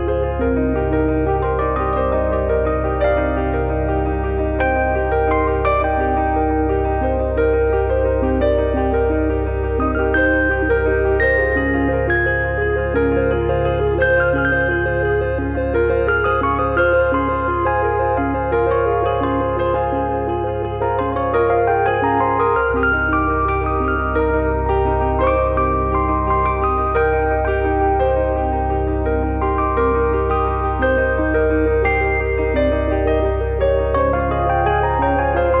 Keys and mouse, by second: 0.0 click, 1.9 click, 2.8 middle click, 3.2 shift+middle click, 3.6 click, 4.3 middle click, 4.6 shift+middle click, 5.1 click, 6.5 middle click, 8.5 click, 12.5 click, 14.0 Delete, 15.5 click, 23.3 click, 27.6 click, 28.7 click, 29.0 click, 30.0 click, 31.0 click, 31.7 click, 33.2 click, 33.5 click, 34.5 click.